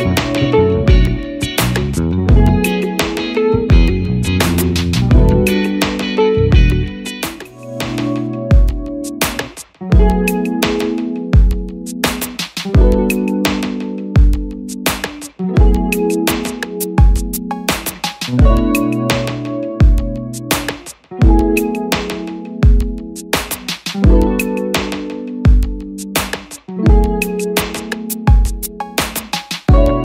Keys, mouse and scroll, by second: 5.3 double click, 10.4 Return, 16.6 click.